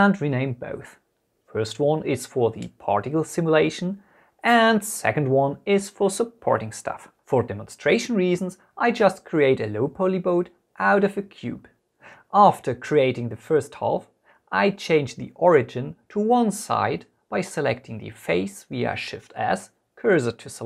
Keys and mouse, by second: 1.9 click, 2.2 F2, 2.7 t, 3.2 click, 3.9 click, 4.5 Return, 4.8 F2, 7.4 shift+a, 7.6 middle click, 7.7 middle click, 8.0 Tab, 8.7 s, 8.8 x, 9.4 click, 9.6 middle click, 10.4 Escape, 10.4-12.0 typing, 12.1 middle click, 13.0 middle click, 13.0 s, 13.0 x, 13.6 ctrl+r, 13.8 Escape, 14.0 middle click, 15.0 z, 15.1 click, 15.2 middle click, 15.6 Tab, 15.8 KP_1, 15.9 KP_3, 17.0 click, 18.2 shift+s, 19.6 Tab.